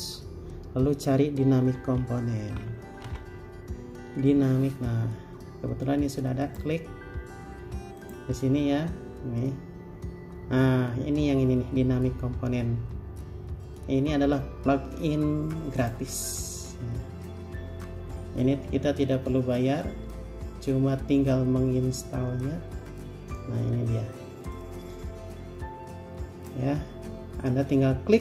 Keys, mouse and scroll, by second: 1.8-3.3 typing.